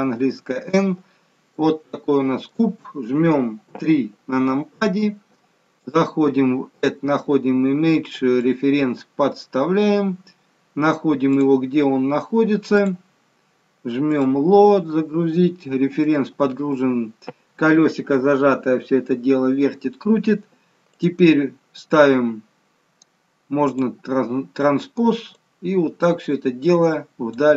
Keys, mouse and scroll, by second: 1.4 middle click, 3.6 KP_3, 5.7 click, 15.9 middle click, 20.8 click, 23.5 click, 25.3 click.